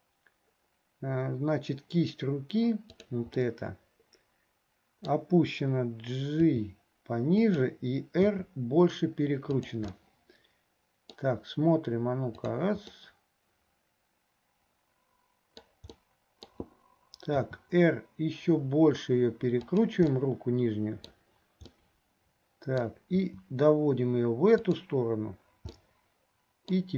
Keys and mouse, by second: 2.9 click, 3.6-5.2 middle drag, 10.1-11.4 drag, 13.1-15.8 drag, 15.4 right click, 16.2 click, 16.2 right click, 20.3 click, 21.9-23.0 drag, 22.9 right click, 25.9 click, 26.4 middle click.